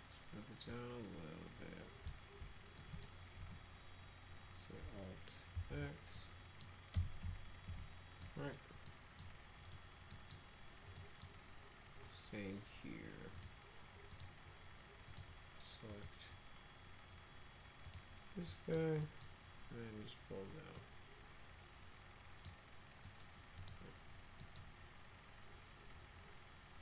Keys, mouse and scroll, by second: 0.6-2.1 drag, 2.8 middle click, 3.4 F3, 5.5 alt+x, 6.1 middle click, 6.9 F3, 7.2 F4, 7.6 F4, 8.2 middle click, 8.9 middle click, 9.6 click, 10.1 middle click, 11.0 middle click, 13.3 click, 14.1 click, 15.0 click, 15.9 click, 17.8 click, 18.4 drag, 19.0 middle click, 20.7-22.4 drag, 23.0 middle click, 23.5 click, 24.4 middle click.